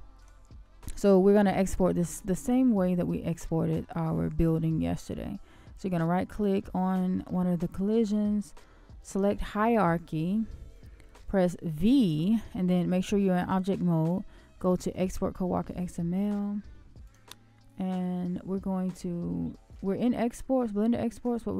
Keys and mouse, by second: 7.9-9.2 right drag, 10.9-11.3 middle drag, 12.1 v.